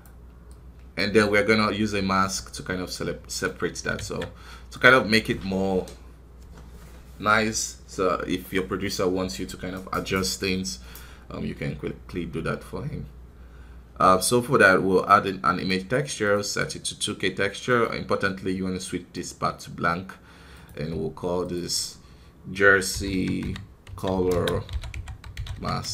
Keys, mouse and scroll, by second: 0.4 click.